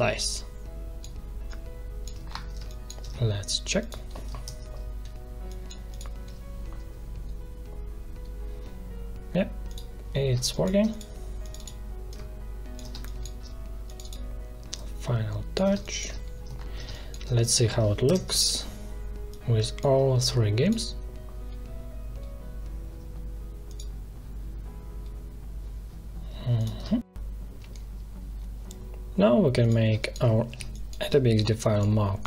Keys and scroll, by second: 2.5 space, 4.4 ctrl+Return, 10.2 space, 12.8 space, 15.7 space, 18.0 ctrl+Return, 26.7 space, 29.8 space.